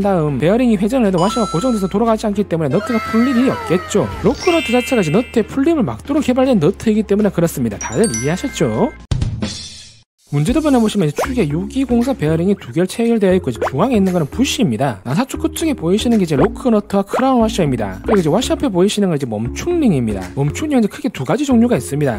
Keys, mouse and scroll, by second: 1.0-1.6 middle drag, 2.0 click, 2.9 click, 3.3 click.